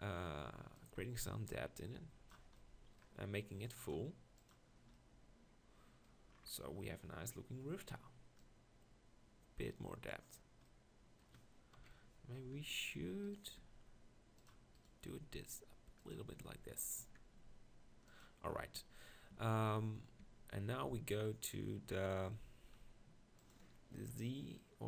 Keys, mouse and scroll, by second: 0.8 middle click, 5.2 middle click, 6.6 middle click, 7.2-8.4 middle drag, 11.8 KP_1, 12.5 Tab, 13.2 click, 13.6 r, 15.0 r, 16.4 Tab, 17.0 Tab, 17.3 r, 19.8 Tab, 20.4 Tab.